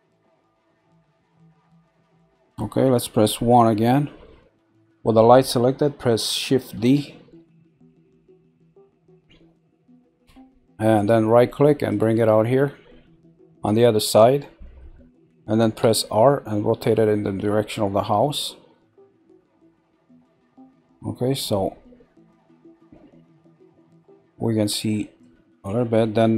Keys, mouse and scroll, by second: 0.0-3.0 middle drag, 11.8 click, 20.7-21.5 middle drag, 22.2-23.9 middle drag, 24.5-26.3 middle drag.